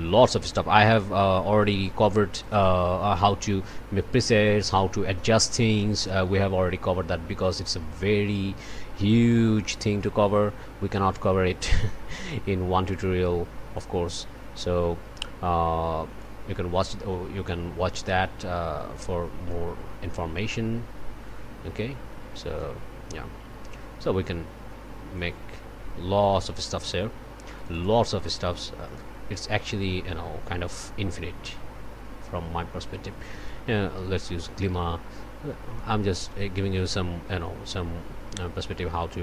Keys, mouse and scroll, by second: 1.6-2.3 scroll up 1, 2.3 click, 9.4-12.1 drag, 13.7-16.4 drag, 19.5-22.8 drag, 25.1-26.9 drag, 27.5 click, 28.9 click, 33.4 click, 35.7-39.2 drag.